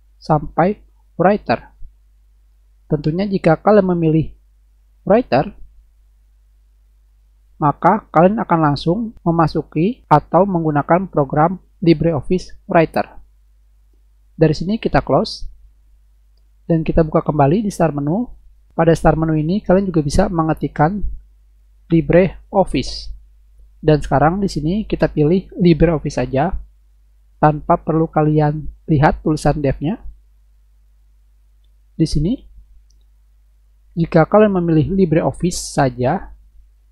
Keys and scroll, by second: 21.4-22.7 typing, 29.9 Return.